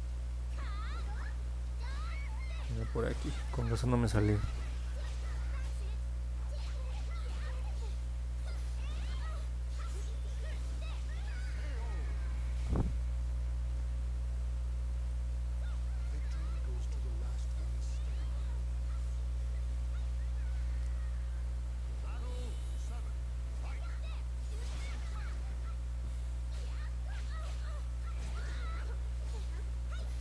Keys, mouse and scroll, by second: 2.7 click, 4.7 click, 6.4 click, 7.0 click, 7.4 click, 9.5 click, 10.0 click, 10.8 click, 11.1 click, 13.3 middle click, 13.7 middle click, 14.5 middle click, 15.0-17.4 alt+drag, 17.6 middle click, 18.0-18.5 scroll up 4, 19.0 alt+middle click, 19.6 middle click, 20.0 middle click, 23.7 click, 25.6 click, 26.7 click, 27.0 click, 27.4 click, 29.0 click, 29.4 click, 29.7 click, 30.1 click.